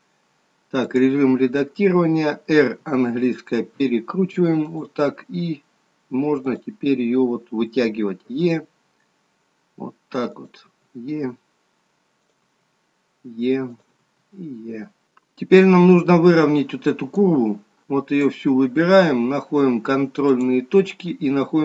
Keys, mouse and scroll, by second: 2.6 r, 6.5 click, 8.4 e, 10.8 e, 12.5 e, 17.3 click.